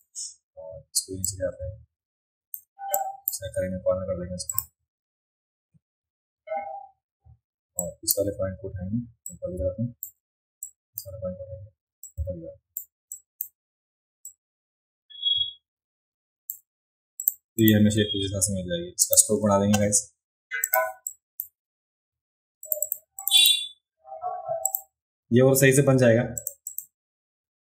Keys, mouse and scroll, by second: 1.2-2.5 drag, 3.0 click, 4.5 click, 7.8 click, 9.3 shift+click, 10.6 click, 12.1 shift+click, 13.1 drag, 14.3-16.5 drag, 17.2 click, 17.6 click, 19.0 click, 20.6 click, 21.1-21.4 drag, 22.7 click, 22.8 click, 23.2 click, 23.4 click, 24.7 click, 26.4 click, 26.7 click.